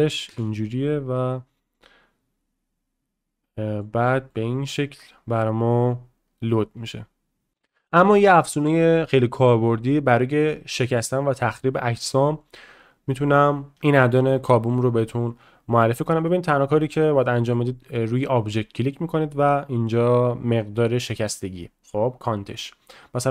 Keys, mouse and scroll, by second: 3.8-4.2 middle drag, 4.3 shift+middle click, 12.0 click, 16.3-17.0 middle drag, 17.2 middle click.